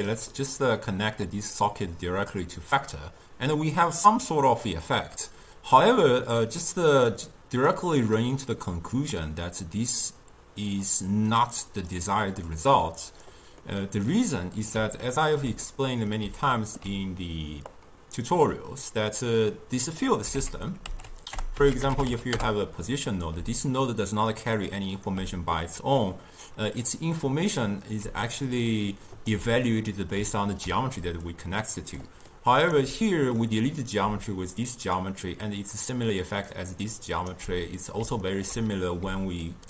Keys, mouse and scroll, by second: 1.4 click, 5.8-7.8 middle drag, 7.8 click, 11.4 click, 12.6 click, 13.7-17.7 middle drag, 17.7-20.5 drag, 20.5 ctrl+a, 23.4 d, 23.7-25.1 drag, 25.1 d, 28.1 d, 28.3-29.4 right drag, 29.4 d, 29.8-31.0 middle drag, 31.0 d, 31.3 click, 32.0 d, 32.4 right click, 32.8 d, 33.2 middle click, 34.1 d, 34.4 click, 35.0-35.6 d, 35.9 click, 36.5 d, 36.9 right click, 37.4 d, 37.7-39.1 middle drag, 39.1 d, 39.5 click.